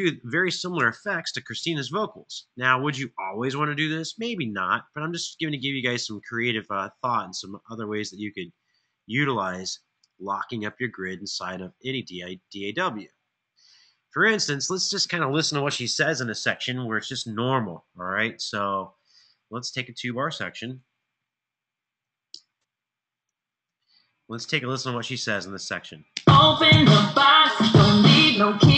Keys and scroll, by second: 1.0 ctrl+alt+Down, 1.3 ctrl+alt+Down, 1.5 ctrl+alt+Down, 20.5-23.0 typing, 23.4 alt+f, 25.8 space.